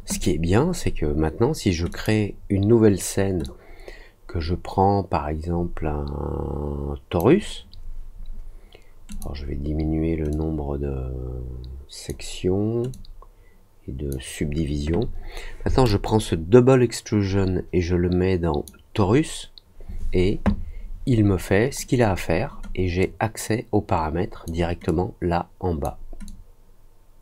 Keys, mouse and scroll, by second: 1.8 click, 3.4-7.1 drag, 9.0 click, 10.2-12.0 drag, 12.9-14.0 drag, 15.8-18.6 drag, 22.9-24.4 drag, 24.8-25.8 drag, 26.2-27.2 drag.